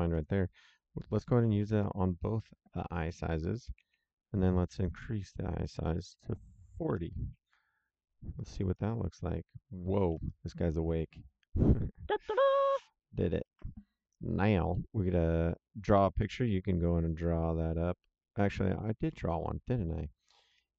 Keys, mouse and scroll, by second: 0.1 ctrl+c, 1.0 click, 1.7 ctrl+v, 3.0 click, 3.7 ctrl+v, 4.8 click, 6.7 KP_4, 6.8 KP_0, 8.5 click, 11.9 click, 13.3 ctrl+Page_Down, 20.5 ctrl+Page_Down.